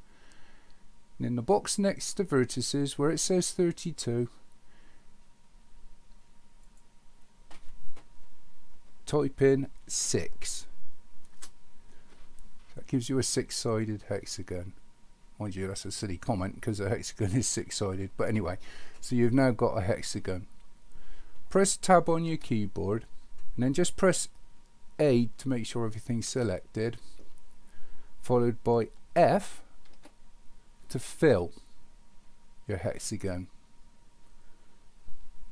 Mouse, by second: 6.6-12.0 drag.